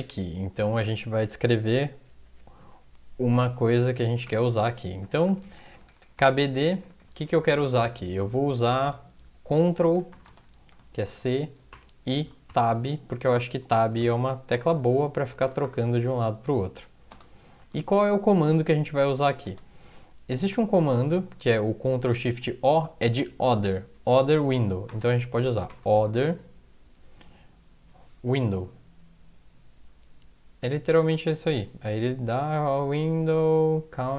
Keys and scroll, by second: 4.3 Return, 5.0-8.8 typing, 10.3-15.7 typing, 16.9-17.6 typing, 19.2-19.9 typing, 25.0-26.7 typing, 28.3 Down.